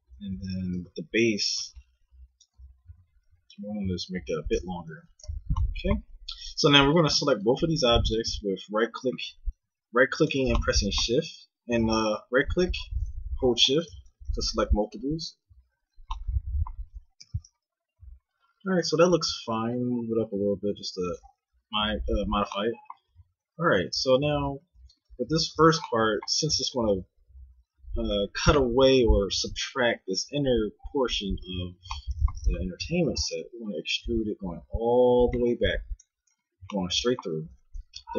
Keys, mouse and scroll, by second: 0.6 a, 0.7 c, 2.8 g, 4.9 a, 5.0 Tab, 5.2 z, 5.9 z, 9.2 g, 11.7 g, 15.8 z, 17.2 KP_1, 19.2 g, 23.0 z, 23.7 a, 24.2 Tab, 24.7 Tab, 25.1 Tab, 33.2 e, 36.4 z, 37.5 a, 37.7 a.